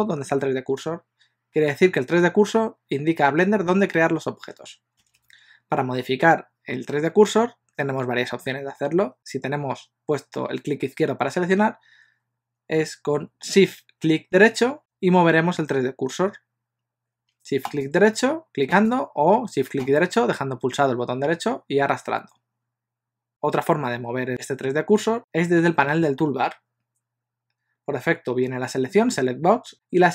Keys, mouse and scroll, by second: 14.8 shift+right click, 17.8 shift+right click, 18.8 shift+right click, 19.9 shift+right click, 25.2 click.